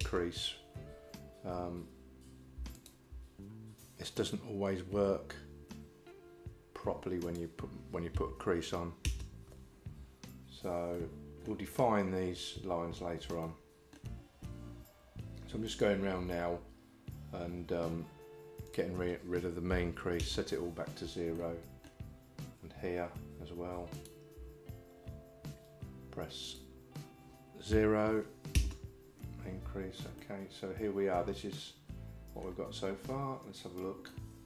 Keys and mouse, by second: 7.3-9.8 drag, 11.0 middle click, 13.5 shift+middle click, 15.7 alt+click, 18.8-20.3 drag, 21.4 middle click, 26.5-29.5 drag, 30.3-32.5 middle drag, 34.1 middle click.